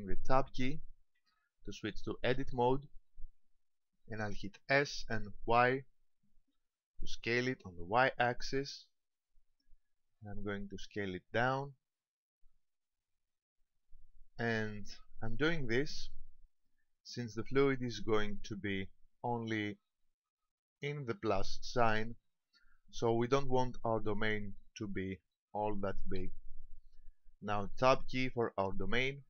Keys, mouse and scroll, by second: 1.2 Tab, 4.6 s, 14.7 click, 16.0 middle click, 24.6 middle click, 29.1 Tab.